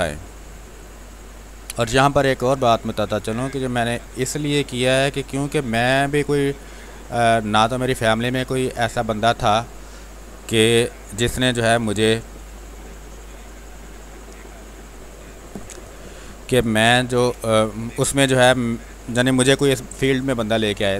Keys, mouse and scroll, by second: 3.7-5.7 drag, 9.9 space, 10.5 r, 10.8-13.8 drag, 17.1 space, 17.5 click, 17.8 space, 18.3 r, 18.5 click, 19.5 b, 19.9 space, 20.4-20.9 ctrl+drag.